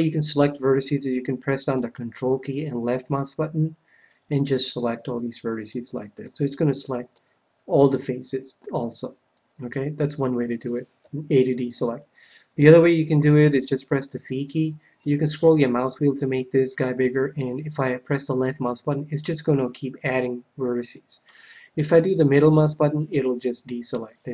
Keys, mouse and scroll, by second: 2.8-4.5 ctrl+drag, 6.2-7.8 middle drag, 9.0 KP_1, 10.9 a, 13.5 c.